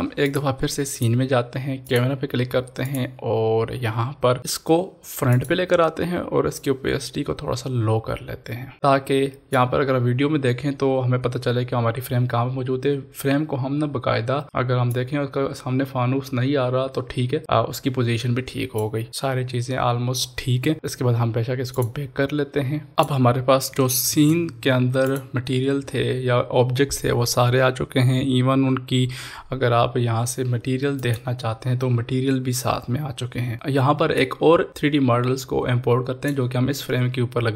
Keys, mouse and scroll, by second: 0.3 click, 3.4-4.6 scroll down 1, 5.3-12.0 drag, 14.9 click, 14.9-19.1 drag, 19.1 ctrl+s, 21.7 ctrl+s, 21.8 click, 25.1 click, 31.0 click, 34.2-37.5 drag.